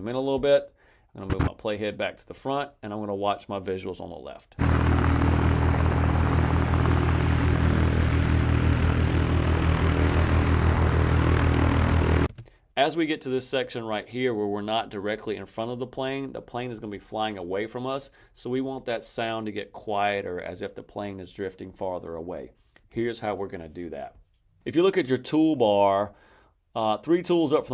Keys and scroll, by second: 4.4 space, 12.2 space.